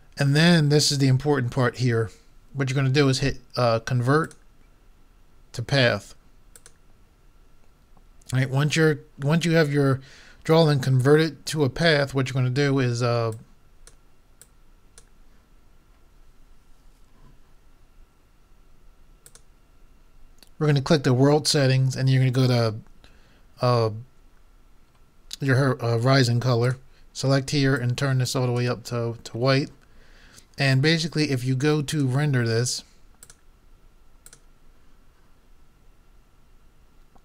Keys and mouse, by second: 4.2-5.8 drag, 13.4-16.3 drag, 19.3-21.0 drag, 26.7-28.5 drag, 31.9-35.0 drag.